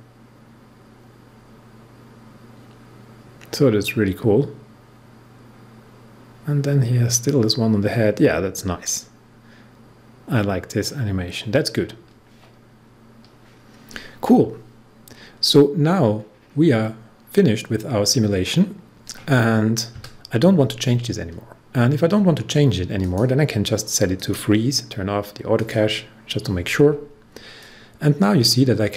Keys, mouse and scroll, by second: 22.9-28.9 drag.